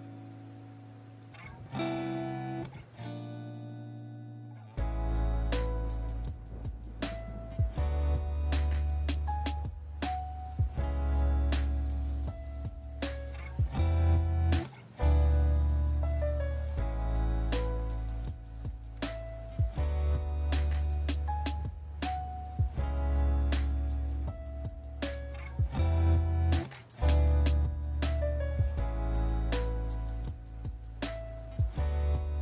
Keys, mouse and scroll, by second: 0.9 click, 1.2 middle click, 1.4 right click, 1.8 right click, 2.2 alt+right click, 2.2 alt+right click, 2.4 alt+right click, 2.5 ctrl+right click, 2.6 ctrl+right click, 2.9 right click, 3.4 right click, 3.5 right click, 3.5 shift+right click, 3.9 alt+right click, 4.5 alt+right click, 4.5 alt+shift+right click, 4.9 alt+right click, 5.6 alt+click, 5.8 alt+click, 5.8 alt+click, 6.8 right click, 7.4 middle click, 7.7 right click, 7.7-8.4 scroll, 8.6 click, 8.9 middle click, 8.9 click, 9.1 click, 9.3 middle click, 9.7 click, 10.0 click, 11.5 click, 12.1 right click, 12.3 right click, 12.7 middle click, 12.9 middle click, 13.5 right click, 14.0 alt+right click, 14.1 alt+right click, 14.3 click, 14.6 right click, 15.6 alt+right click, 15.7-16.7 scroll, 17.2 scroll, 17.6 middle click, 18.5 click, 19.4 right click, 19.7 click, 19.8 right click, 20.2-21.4 scroll, 21.4 right click, 21.7 scroll, 21.9 middle click, 22.2 middle click, 22.3 alt+right click, 22.5 click, 23.1 middle click, 23.6 click, 24.0 click, 24.1 click, 24.2 click, 24.4 click, 25.0 alt+right click, 25.0 alt+middle click, 25.4 alt+middle click, 26.0 middle click, 26.3 middle click, 28.0 alt+shift+right click, 29.0 alt+right click, 29.9 alt+right click, 30.1 click, 30.4 alt+right click, 30.5 ctrl+z, 30.9 middle click, 31.0 scroll, 31.2 click, 31.6 alt+right click, 31.8 alt+right click, 32.0 click.